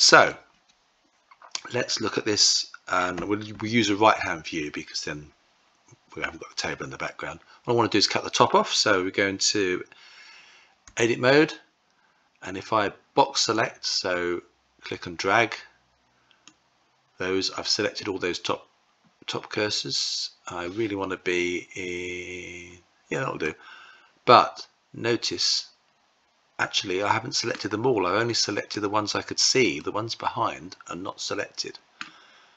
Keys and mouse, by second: 10.7 Tab, 13.4-16.3 drag, 23.2-27.4 middle drag, 29.6-31.8 middle drag.